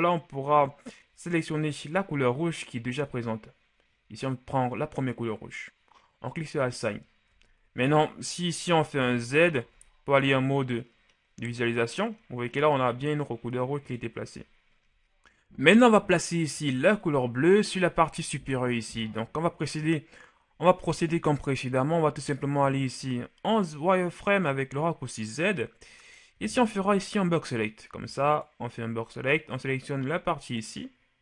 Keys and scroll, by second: 7.7 Tab, 9.2 shift+z, 9.9 shift+z, 14.3 KP_1, 23.1 shift+z, 26.5 b.